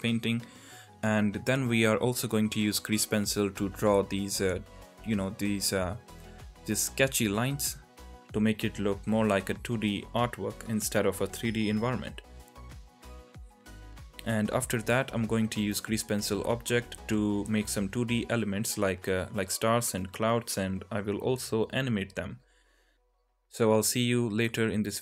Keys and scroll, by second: 0.4 ], 0.7 alt+q, 1.7 ctrl+z, 8.0 alt+q, 10.7 ctrl+z, 16.5-17.7 typing, 17.0 ctrl+z, 17.2 ctrl+z, 19.9 alt+q, 20.4 ctrl+z, 20.6 alt+q, 20.8 ctrl+z, 23.9 alt+q, 24.1 ctrl+z.